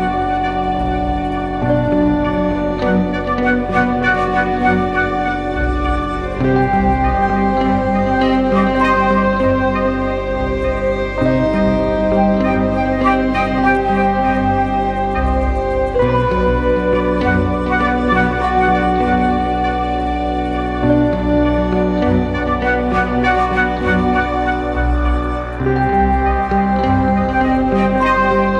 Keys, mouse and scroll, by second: 4.5 double click, 14.2 double click, 22.7-23.2 typing, 23.6 double click.